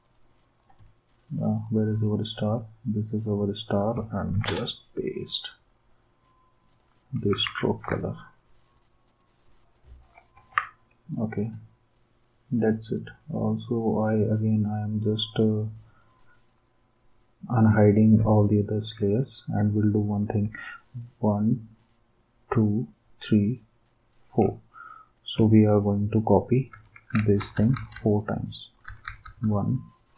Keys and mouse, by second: 4.3 ctrl+v, 4.5 Return, 7.3 ctrl+s, 10.4 ctrl+s, 26.7 ctrl+d, 27.4 Right, 27.6 Right, 27.7 Right, 28.0 Right, 28.7 Right, 28.9 Right, 29.0 Right, 29.3 Right, 29.4 Right.